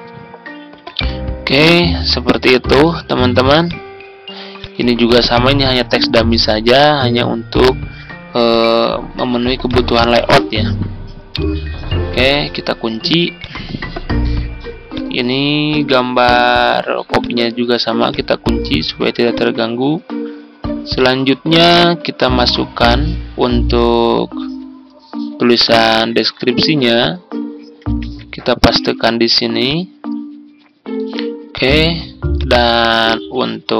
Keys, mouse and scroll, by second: 0.8 Escape, 2.2 click, 2.9 ctrl+z, 3.5-10.9 drag, 11.0-12.1 scroll down 1, 12.1-24.8 drag, 26.0 ctrl+x, 26.9 click, 27.9 ctrl+v, 29.5-33.7 drag.